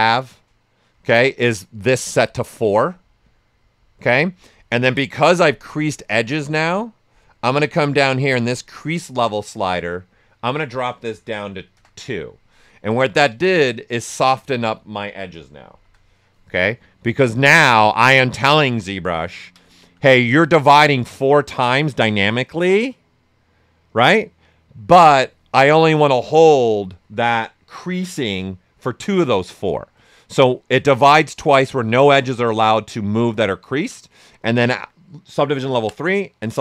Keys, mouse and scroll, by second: 11.1 2, 11.7 Return, 15.7 shift+m, 16.7 right click, 17.7 typing, 18.3 alt+right click, 18.6 ctrl+right click, 27.6 alt+right click, 28.1 shift+m.